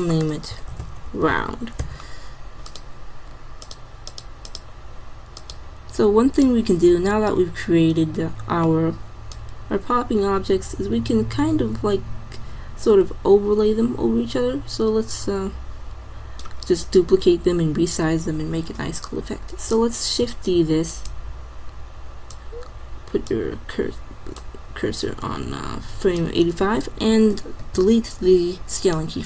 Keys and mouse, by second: 3.7-6.3 drag, 9.4-11.2 drag, 20.4 shift+d, 23.5 click, 24.5-26.0 drag, 27.6 alt+i.